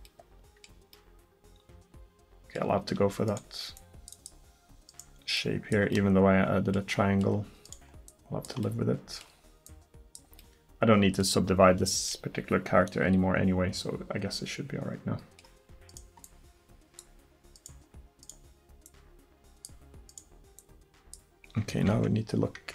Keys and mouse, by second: 3.3 right click, 3.8-7.1 middle drag, 7.1-8.1 drag, 8.1-11.9 middle drag, 11.9-14.1 drag, 14.1 middle click.